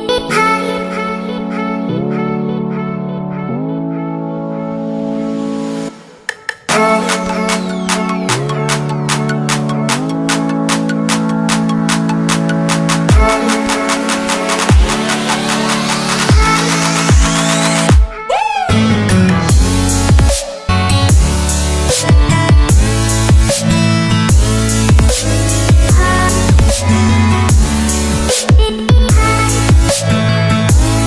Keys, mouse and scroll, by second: 12.0 e, 12.5 click, 12.8-13.5 scroll down 1, 13.5 click, 14.4 click, 14.7-15.2 scroll down 1, 15.2 click, 17.0 click, 18.7 Return, 21.2 click, 26.7 click, 27.9-29.0 scroll down 1, 29.1 click.